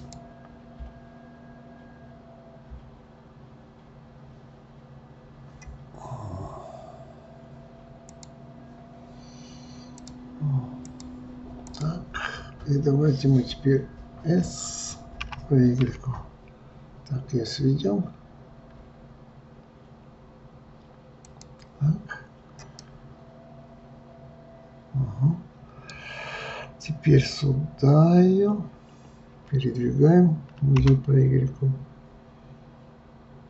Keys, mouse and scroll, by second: 6.4-7.9 scroll up 1, 8.1 click, 10.0-11.8 drag, 15.2 s, 22.8-25.8 middle drag, 30.8 g.